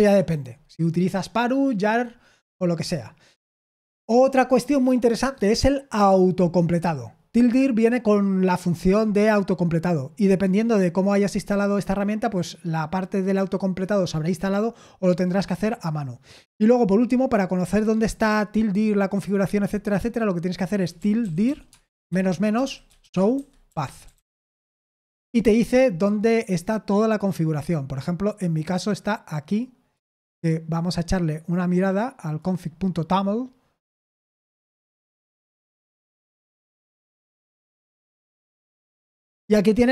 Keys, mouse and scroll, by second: 0.0 ctrl+l, 20.9-24.8 typing, 35.3-36.1 typing, 37.8 ctrl+v, 38.4 Return.